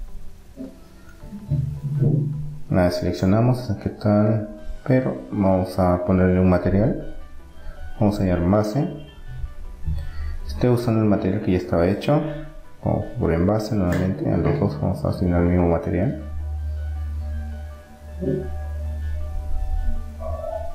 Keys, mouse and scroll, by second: 1.2 middle click, 2.1-5.3 drag, 6.3-8.1 drag, 8.4 BackSpace, 8.6 BackSpace, 11.5 click, 13.2 click, 16.1 middle click, 18.4-19.6 middle drag.